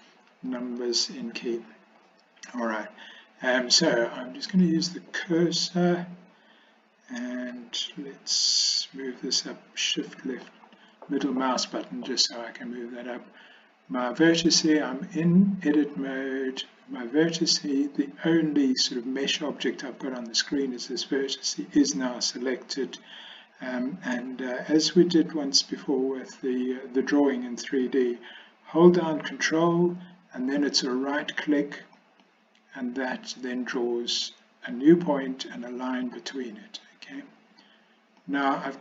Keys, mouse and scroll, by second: 0.4 n, 1.0 n, 4.6 click, 8.4-10.5 shift+middle drag, 32.0 ctrl+right click, 38.2 ctrl+right click.